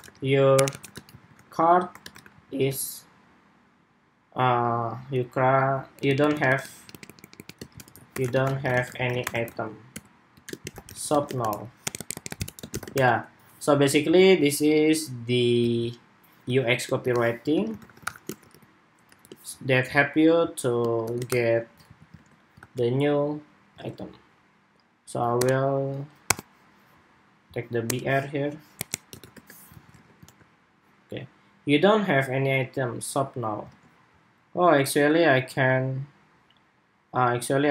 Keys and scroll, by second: 13.8 super+s, 21.6 super+s, 22.0 super+Tab, 22.5 super+r, 23.6 super+Tab, 29.4 super+s, 29.6 super+Tab, 30.0 super+r, 33.4 super+Tab.